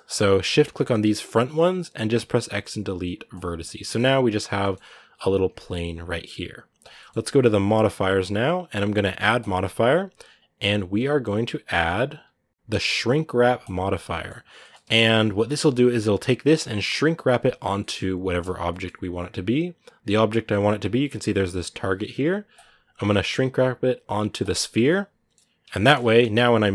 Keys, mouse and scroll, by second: 3.2 x, 3.5 middle click, 4.0 a, 5.5 middle click, 6.1 scroll up 2, 6.8-13.5 middle drag, 13.8 scroll down 2, 13.9-14.9 middle drag, 14.9 scroll up 1, 15.1 shift+middle click, 15.7 g, 16.7 right click, 17.3 right click, 17.6-22.6 middle drag, 22.6 click, 24.6 middle click, 25.4 Tab, 25.5 middle click, 26.2 g.